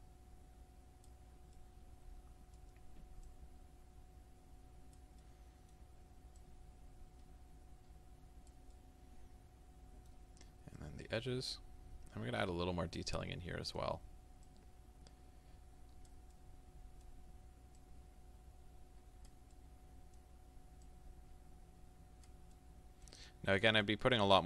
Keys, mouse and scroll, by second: 1.6-3.3 middle drag, 3.3-5.3 drag, 5.3-6.4 middle drag, 6.4-8.8 drag, 8.8-10.8 middle drag, 10.8-13.2 drag, 13.2-14.5 middle drag, 14.5-16.3 drag, 16.3-17.8 middle drag, 17.8-19.6 drag, 19.6-20.9 middle drag, 20.9-22.6 drag, 22.6-23.9 middle drag, 23.9-24.4 drag.